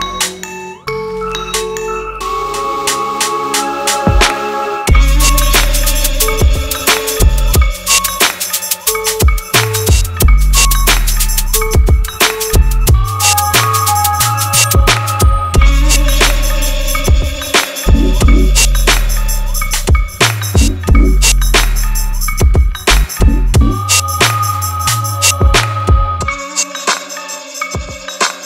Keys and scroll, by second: 9.5 ctrl+z.